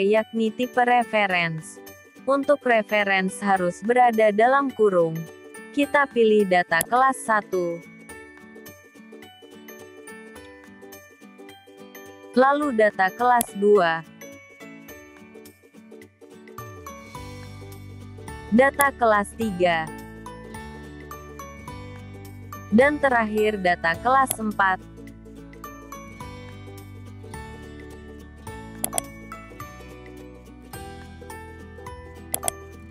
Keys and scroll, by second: 8.3 F4, 14.6 F4, 20.2 F4, 25.0 F4.